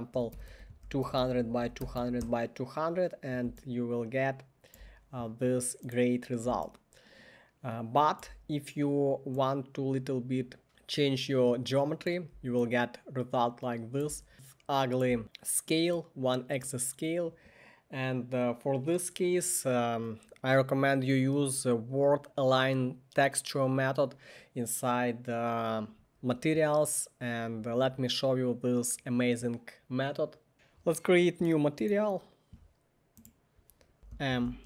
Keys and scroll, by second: 0.0-2.0 typing, 1.4 Tab, 2.2 Return, 33.7-34.6 typing.